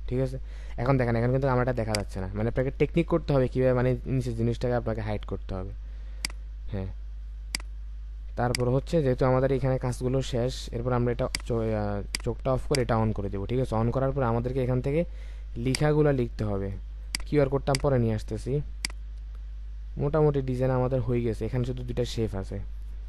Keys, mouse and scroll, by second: 0.2-1.1 alt+scroll down 1, 9.0-9.6 alt+scroll down 3, 13.5-14.1 alt+scroll up 1, 15.6 space, 16.9 space.